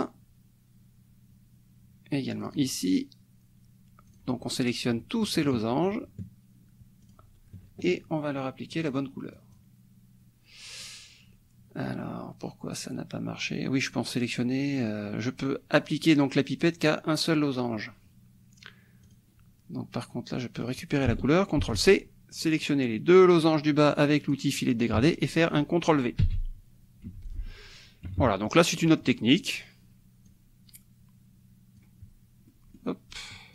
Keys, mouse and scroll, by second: 2.4 click, 4.1 click, 5.4 shift+click, 7.0 shift+click, 8.8 click, 9.3 click, 13.8 click, 19.0 click, 20.6 click, 21.6 ctrl+c, 22.6-24.5 drag, 26.2 ctrl+v, 27.1 F1, 27.3 click, 28.1 KP_Subtract, 28.8 click, 29.3-30.3 middle drag, 30.3-32.0 drag, 32.5 click.